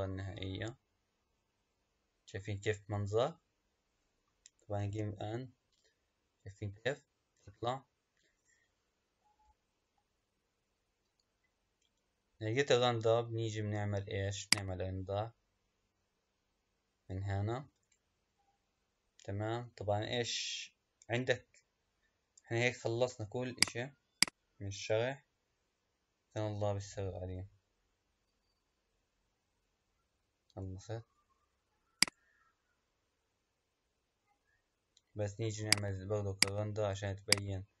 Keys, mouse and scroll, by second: 14.3-17.6 drag, 20.5 scroll down 4, 21.1-21.8 scroll down 3, 21.8 scroll up 5, 23.5 click, 24.2 click, 25.4 scroll down 1, 36.0-37.8 drag.